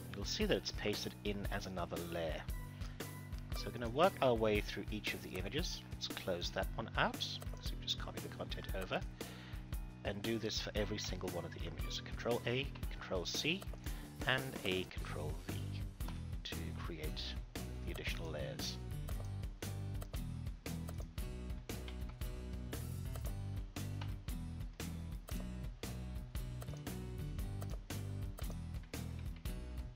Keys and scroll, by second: 10.9 ctrl+a, 12.6 ctrl+c, 15.9 ctrl+v, 21.6 ctrl+a, 22.1 ctrl+c, 22.8 ctrl+c, 23.9 ctrl+v, 29.0 ctrl+a, 29.3 ctrl+c.